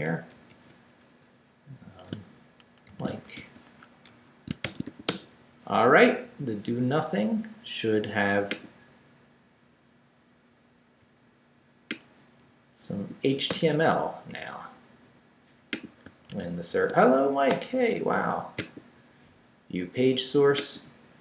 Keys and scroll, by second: 0.3 shift+', 1.2 shift+Left, 1.7 Left, 2.6-4.8 typing, 4.0 Escape, 5.1 Return, 13.5 BackSpace, 14.3 Return, 16.3 super+r.